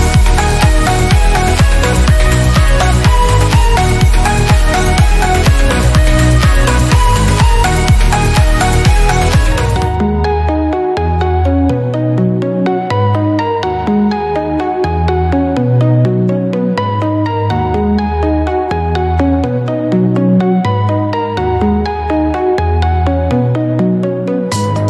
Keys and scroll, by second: 0.0 Return, 6.4 0, 6.9 ., 7.3 1, 7.5 Return, 14.6 BackSpace, 14.8 0, 15.8 1, 16.1 Return, 18.1 Right, 18.4 BackSpace, 19.3 3, 19.7 Return, 21.5 Right, 21.9 BackSpace, 22.3 5, 22.4 Return.